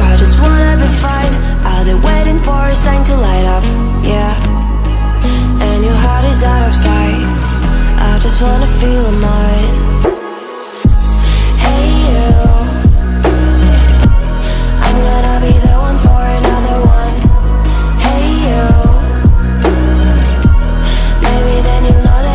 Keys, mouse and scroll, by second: 0.7-4.4 drag, 4.4-6.2 drag, 8.9 click, 14.1 click, 17.0 click.